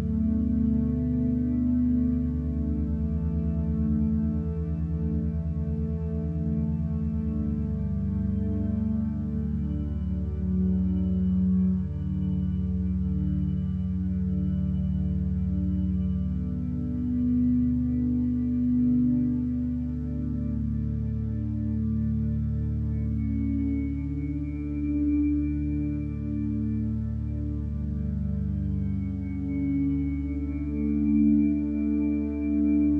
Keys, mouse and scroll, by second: 0.0 ctrl+space, 3.4 Up, 4.3 Up, 5.2 1, 6.5 Up, 16.6-17.4 scroll up 1, 17.4 ctrl+space, 18.8 click, 19.3 ctrl+space, 21.2 ctrl+space.